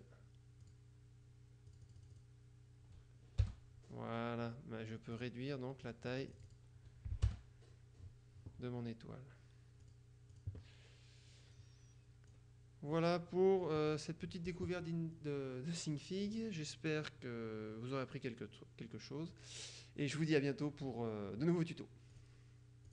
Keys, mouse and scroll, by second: 0.0 click, 0.7 click, 1.8 click, 3.5 Return, 5.3 click, 6.0 click, 7.4 Return, 9.9-11.0 drag, 11.5-12.9 drag, 13.1 click, 14.0 click, 22.3 click.